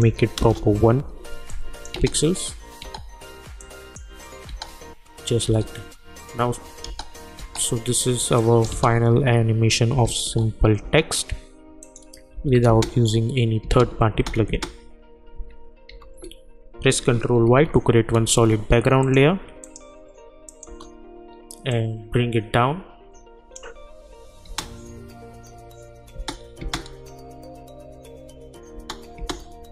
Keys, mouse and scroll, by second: 0.4 Return, 1.5 click, 1.9 space, 3.6 click, 4.5 space, 8.4 click, 8.7 space, 11.8 click, 12.3 n, 12.6 space, 15.3 u, 15.9 u, 17.5 ctrl+y, 19.0 click, 20.6 Return, 22.0-24.4 drag, 24.4 space, 28.7 space.